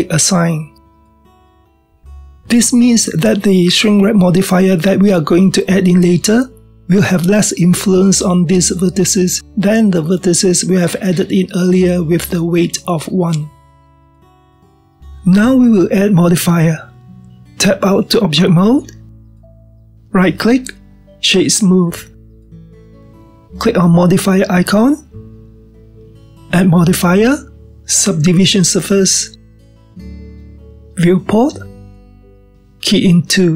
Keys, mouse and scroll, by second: 2.3-3.5 drag, 3.5-5.0 middle drag, 5.0-5.8 scroll down 1, 5.8-14.5 middle drag, 16.7-17.9 scroll down 3, 17.9 scroll down 1, 18.0-19.5 middle drag, 19.5 Tab, 20.0-21.4 middle drag, 21.4-24.5 right drag, 26.2 click, 27.5 click, 29.3-30.6 drag, 32.4-33.5 drag.